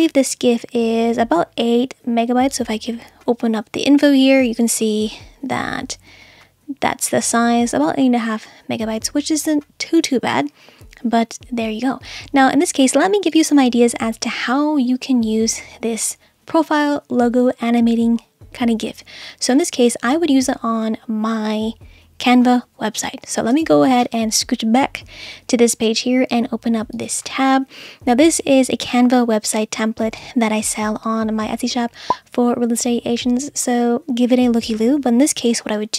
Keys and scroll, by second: 23.5 space.